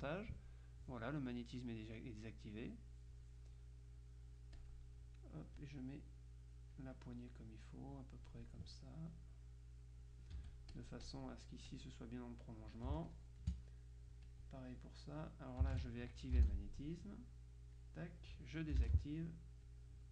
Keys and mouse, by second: 3.6 click, 4.7 click, 5.7-7.4 drag, 9.2-11.7 drag, 10.4 Escape, 13.0 space, 13.2 click, 14.4 click, 15.8 ctrl+z, 17.2-18.4 shift+drag, 19.8-20.1 drag.